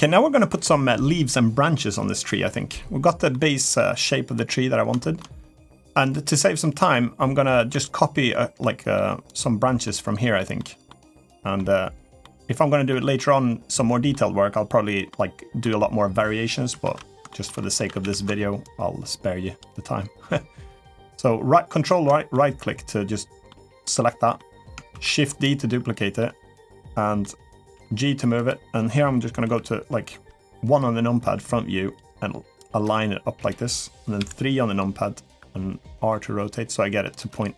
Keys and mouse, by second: 3.1 middle click, 3.9 middle click, 4.8 shift+middle drag, 5.7 click, 6.4-6.7 middle drag, 7.5 Tab, 8.4 middle click, 9.1 click, 9.6 middle click, 10.3 middle click, 11.1 middle click, 12.0 middle click, 13.0 middle click, 14.9 middle click, 16.6 alt+z, 17.1 shift+middle click, 17.4 middle click, 17.7 a, 17.8 a, 18.5-21.7 ctrl+right drag, 22.1-23.3 middle drag, 23.6 middle click, 25.5 middle click, 27.0 middle click, 27.1 right click, 27.7 g, 29.2 KP_1, 31.0 r, 32.6 g, 34.0 KP_3, 35.6 r, 37.1 g.